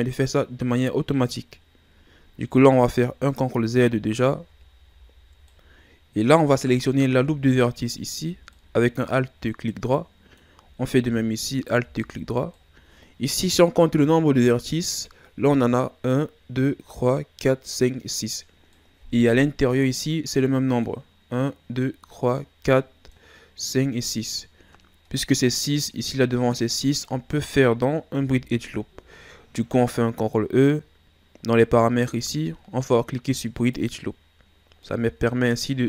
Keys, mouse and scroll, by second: 2.5 ctrl+e, 3.9 ctrl+z, 4.5 ctrl+z, 5.5-7.9 middle drag, 7.9 alt+right click, 8.5-11.5 middle drag, 11.5 alt+shift+right click, 12.5-15.6 middle drag, 18.7 middle click, 19.6-20.4 scroll up 1, 20.4-28.2 middle drag, 28.2 ctrl+e, 34.7 scroll down 1, 34.8-35.8 middle drag.